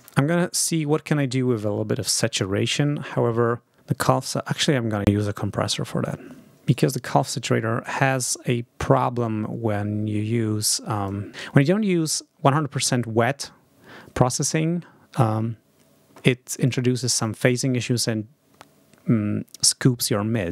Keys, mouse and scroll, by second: 0.4 scroll up 2, 6.5 click, 6.6 right click, 7.7 click, 8.1 right click, 10.8 click, 16.5 click.